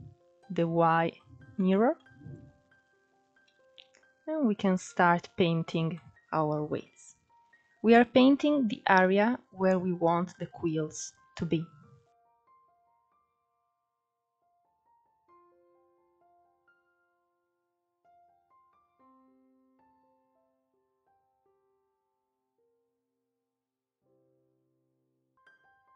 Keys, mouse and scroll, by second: 0.5-4.1 drag, 4.1 middle click, 4.7-5.2 scroll up 1, 5.2-12.7 drag, 12.7 shift+middle click, 13.0-14.2 drag, 14.2 middle click, 14.4 click, 15.7 scroll down 2, 15.8 middle click, 16.0 scroll up 3, 16.3 ctrl+s, 16.5 shift+middle click, 17.0 click, 18.5 scroll down 2, 18.5 middle click, 18.6 scroll up 3, 18.8-19.9 drag, 19.9 middle click, 20.1 scroll down 2, 20.3 click, 21.0 scroll down 3, 21.1 middle click, 21.4-21.8 scroll up 4, 21.5 shift+middle click, 21.8 click, 22.3 scroll down 1, 22.4 middle click, 22.8 scroll up 2, 23.0 click, 25.4 scroll down 3, 25.5 middle click.